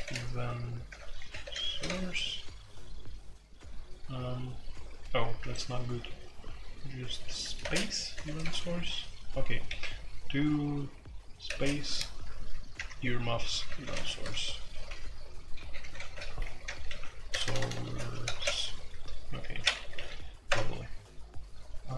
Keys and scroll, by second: 0.0-1.9 typing, 5.5 Escape, 6.0-8.4 typing, 8.1 Escape, 9.6 typing, 11.4 typing, 12.5-20.4 typing.